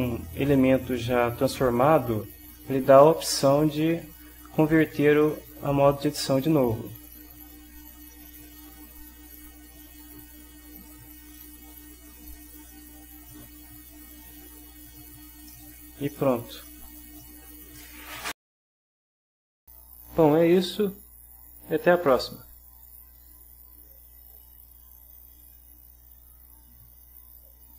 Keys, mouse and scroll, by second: 8.3-9.3 drag, 10.5-15.1 right drag, 15.5-17.9 middle drag.